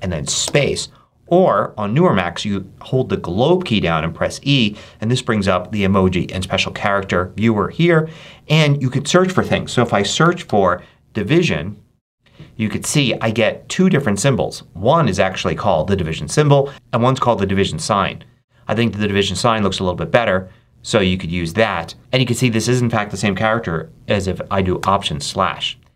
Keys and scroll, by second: 0.4 ctrl+super+space, 9.7-11.2 typing, 22.0 BackSpace, 24.7 alt+/, 25.7 alt+BackSpace.